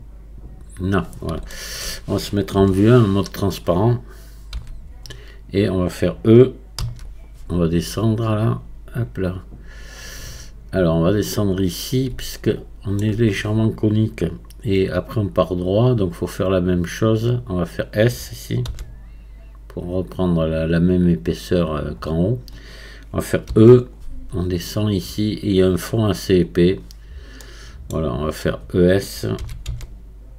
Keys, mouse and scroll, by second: 1.1 scroll down 2, 1.5-2.5 shift+middle drag, 2.5 KP_1, 3.3 scroll up 2, 4.0-4.5 scroll down 1, 4.5 z, 8.3-11.9 drag, 11.9 scroll up 3, 12.3-15.4 shift+middle drag, 15.4-18.4 drag, 23.5 e, 24.8-27.4 drag, 27.4 middle click, 28.2-29.4 scroll down 3, 29.4 e.